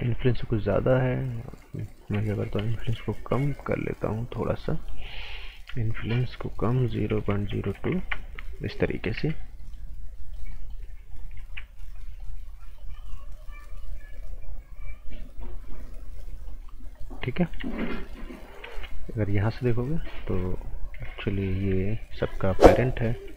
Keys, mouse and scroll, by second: 0.0-0.5 typing, 2.6 s, 4.6 click, 5.7 s, 6.3 click, 7.1 KP_0, 7.3 KP_Decimal, 7.5 KP_0, 7.9 KP_Enter, 8.6 scroll down 1, 8.8 right click, 9.1 z, 9.6 right click, 11.1 click, 11.3 z, 11.7 scroll down 1, 12.0 right click, 12.7 click, 16.6-17.2 scroll up 1, 17.2 right click, 18.6 ctrl+z, 19.2 click, 21.7 z, 22.1 scroll down 1, 22.3 right click, 22.6 scroll up 1, 22.9 right click.